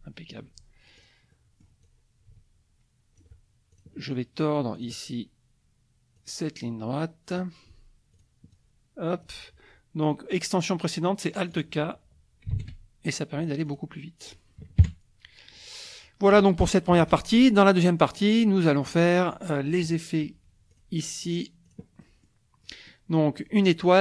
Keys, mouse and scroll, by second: 1.0 click, 1.3-1.8 drag, 2.3-3.4 ctrl+drag, 3.7 ctrl+click, 4.8 click, 6.2-7.5 drag, 8.2 click, 8.5 click, 10.3 click, 11.5 click, 12.5 alt+q, 13.7 click, 14.8 KP_Subtract, 15.6 click, 16.9 KP_Subtract, 18.2 click, 20.7 click, 21.8 click, 22.0 click, 22.6 click.